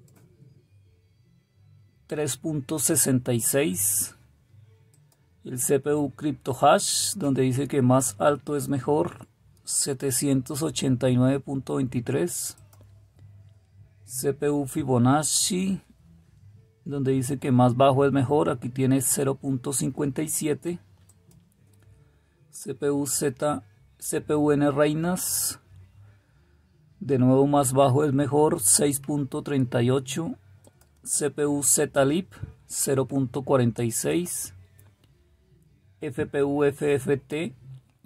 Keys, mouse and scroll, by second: 30.7 click, 34.5 click.